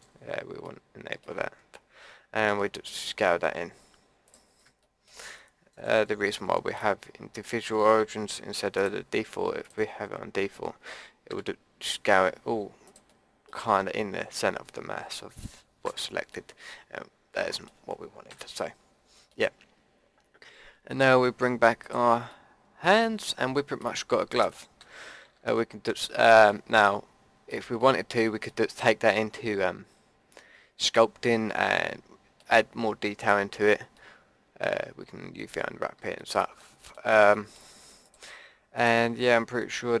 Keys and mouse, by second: 2.5 s, 4.8-6.3 middle drag, 6.3-7.3 drag, 8.7-11.9 drag, 11.3 s, 13.1-14.8 drag, 15.8 ctrl+z, 16.3 click, 18.3 a, 20.7 middle click, 21.8 click, 22.3-23.7 middle drag, 24.8 a, 25.2 a, 25.4 Tab, 30.5-30.9 middle drag, 34.0-35.0 middle drag, 38.0-40.0 middle drag, 39.2 Tab.